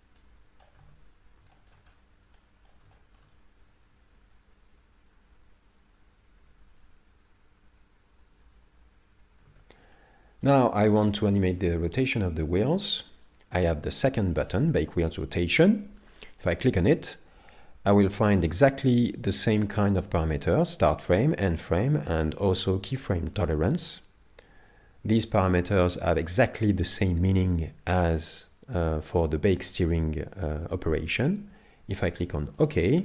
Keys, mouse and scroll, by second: 0.3 click, 0.8 alt+a, 1.6 shift+middle click, 2.0 scroll up 3, 2.4 middle click, 3.0 shift+middle click, 9.5 alt+a, 10.0 middle click, 10.7-11.2 scroll down 2, 11.0 middle click, 11.6-12.2 scroll up 5, 12.2 shift+middle click, 16.3 click.